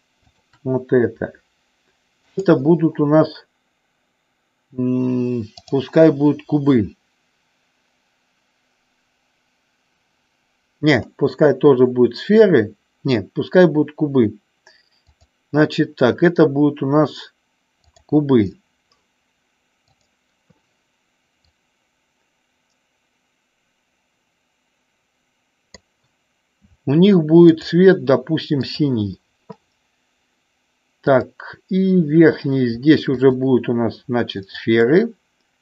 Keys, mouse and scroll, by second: 2.3 click, 5.7-11.2 drag, 15.1-18.1 drag, 20.0 click, 21.5-25.9 drag, 27.7 click, 28.6 click, 33.2-34.4 shift+drag.